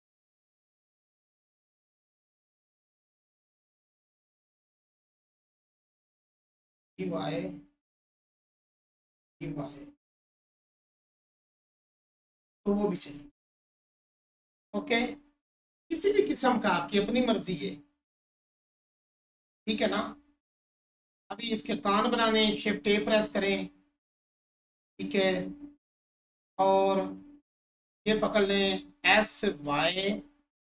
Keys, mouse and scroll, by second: 1.3-1.6 scroll up 1, 2.2-3.0 scroll down 1, 3.1-5.4 alt+drag, 10.4 1, 11.5 click, 12.4-13.1 scroll down 1, 14.4 click, 15.0-16.5 alt+drag, 16.5-16.9 scroll down 1, 17.0-20.1 alt+drag, 20.1 scroll down 1, 20.5-27.4 alt+drag, 27.9-29.6 scroll down 1.